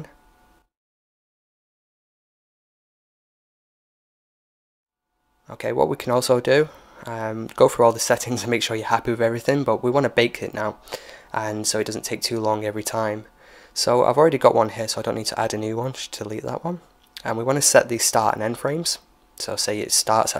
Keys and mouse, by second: 0.2-1.2 middle drag, 2.4-3.8 drag, 3.2-5.4 middle drag, 5.4-9.5 drag, 9.5-13.1 middle drag, 10.7-12.3 drag, 13.6-15.5 drag, 15.9-17.6 drag.